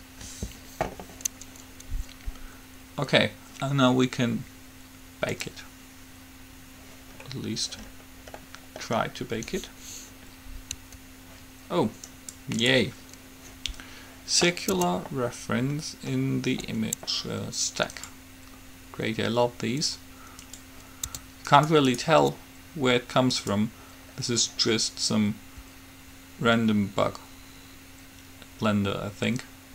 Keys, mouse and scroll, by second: 0.0 Return, 5.5-7.3 drag, 7.4-10.3 middle drag, 10.8 Escape, 12.4-14.1 right drag, 14.9 Tab, 18.1-19.9 drag, 20.6-22.4 drag, 21.4 Tab, 21.9-23.4 right drag, 23.6-25.4 drag.